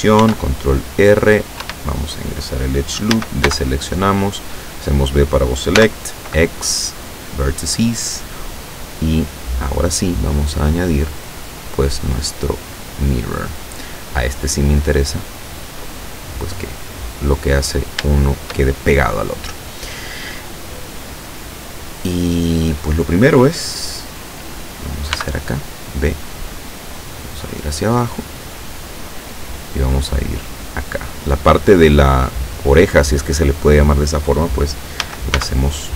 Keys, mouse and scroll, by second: 0.3 ctrl+r, 1.0 click, 1.7 Escape, 3.2 a, 3.5 b, 4.0-5.2 drag, 5.8 x, 7.4 click, 11.6 click, 13.3 click, 14.7 click, 17.6-18.0 scroll up 2, 25.2 b, 25.7 click, 27.0-29.1 drag, 29.6-31.6 drag, 35.0 a, 35.4 b, 35.8 click.